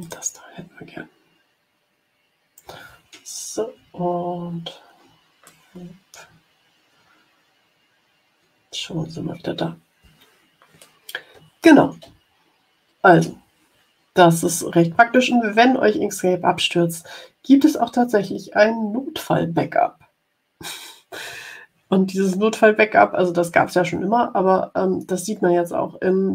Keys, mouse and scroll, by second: 0.0 click, 3.8-4.7 ctrl+scroll down 4, 5.5 click, 6.4-8.2 ctrl+scroll up 5, 8.8 ctrl+scroll down 2, 10.8 click, 12.6 ctrl+scroll up 2.